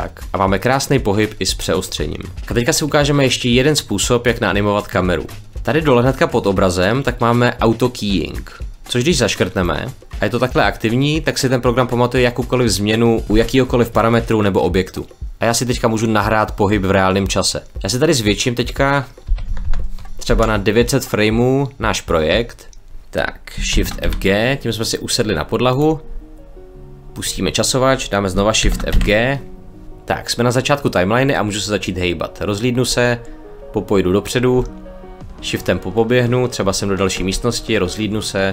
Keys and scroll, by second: 19.2 9, 19.3 0, 20.2 Return, 23.6 shift+f, 23.9 g, 28.5 shift+f, 28.8 g, 32.8 w, 37.1 w, 38.4 w.